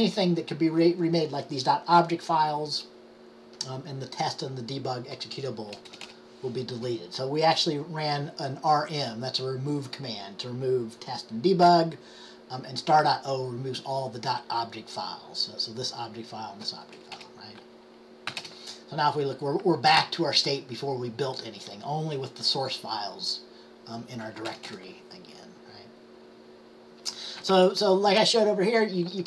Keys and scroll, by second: 18.4 d.